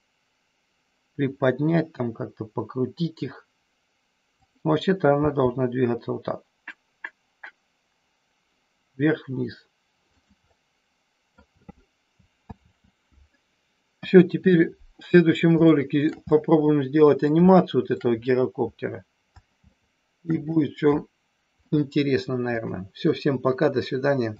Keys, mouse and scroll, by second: 4.3 click, 5.2 g, 10.2 click, 10.5 middle click, 12.4 ctrl+z, 13.9 KP_1, 15.6 shift+middle click, 16.3-17.3 middle drag, 17.5 shift+middle click, 19.6 shift+middle click, 21.6-22.6 drag.